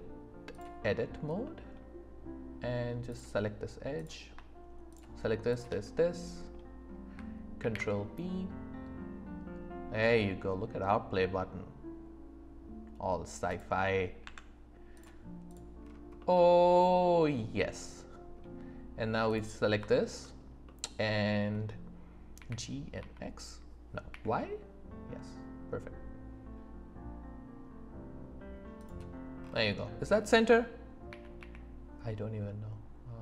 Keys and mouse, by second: 1.4 middle click, 5.5 shift+click, 5.9 middle click, 7.6 ctrl+b, 14.2 Tab, 16.2-18.3 middle drag, 19.3 click, 22.3 g, 23.0 x, 24.1 y, 31.1 g, 31.4 y.